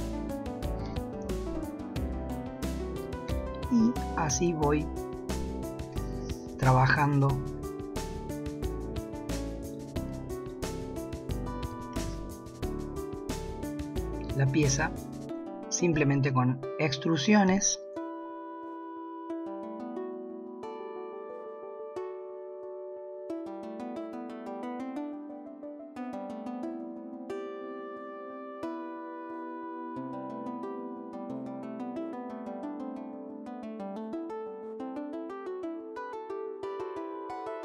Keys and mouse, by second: 0.9 g, 3.3 alt+click, 4.4 s, 6.6 g, 10.4 alt+shift+click, 16.0 shift+middle click, 17.5 e, 18.7 g, 20.0 ctrl+r, 20.6 s, 21.2 s, 21.8 ctrl+r, 22.1 g, 22.7 s, 23.6 ctrl+r, 23.9-26.8 typing, 24.4 shift+middle click, 24.6 ctrl+r, 26.6 middle click, 28.0 s, 28.5 ctrl+r, 29.6-33.0 typing, 31.8 shift+middle click, 34.4 ctrl+r, 34.9 s, 35.6 s, 36.0 ctrl+r, 36.2 s, 36.8 shift+middle click, 37.2 alt+click, 37.4 e.